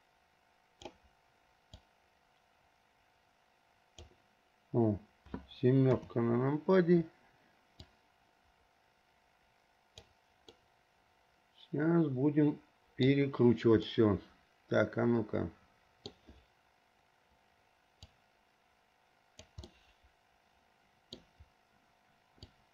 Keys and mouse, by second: 2.1-4.2 drag, 6.1 KP_7, 8.2-10.3 drag, 10.8 middle click, 11.1 click, 11.5-13.4 middle drag, 14.1-16.5 middle drag, 18.4-19.7 drag, 19.9-21.4 middle drag.